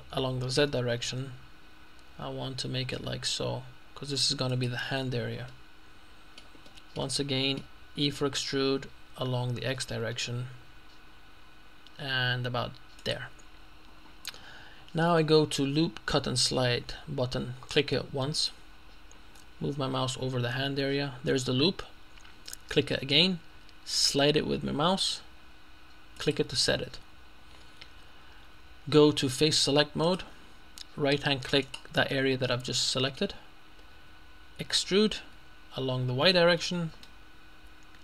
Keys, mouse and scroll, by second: 0.7 z, 4.5 click, 5.5 middle click, 6.7 shift+middle click, 7.3 shift+middle click, 8.1 e, 9.7 x, 13.1 click, 18.4 click, 22.8 click, 26.2 click, 30.1 click, 31.7 right click, 32.6-33.7 middle drag, 33.7 scroll up 1, 34.8 e, 36.6 y.